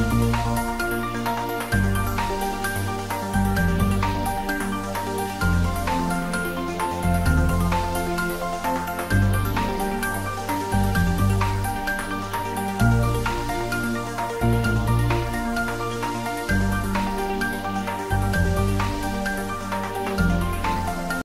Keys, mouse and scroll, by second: 0.0 click, 0.5 typing, 0.9 Return, 1.3 scroll down 1, 1.4 middle click, 1.8 scroll up 1, 2.4-2.7 scroll up 1, 3.1 scroll down 1, 3.3 g, 3.3 middle click, 3.4 g, 3.7 click, 3.8 scroll up 1, 4.0 middle click, 4.1 g, 5.0 middle click, 5.7 click, 5.9 middle click, 6.0 g, 6.3-6.7 scroll up 2, 6.6 click, 7.9 click, 10.7 scroll down 1, 11.8 scroll up 1, 11.9 scroll down 1, 12.1 scroll up 1, 12.2 middle click, 12.3 scroll down 1, 12.4 scroll up 1, 12.6 middle click, 13.9 scroll up 1, 14.1 middle click, 14.2 scroll down 2, 14.3 scroll up 2, 14.4 middle click, 15.4 scroll down 1, 16.5-16.8 scroll down 1, 17.1 middle click, 17.7 scroll up 1, 19.3-19.7 scroll up 2, 19.4 middle click, 20.7-21.1 scroll down 1.